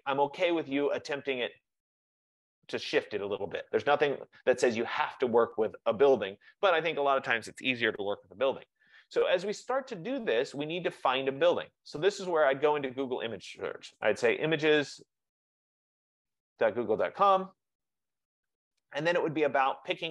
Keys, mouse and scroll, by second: 11.3 F15, 12.4 click, 13.7-17.3 typing.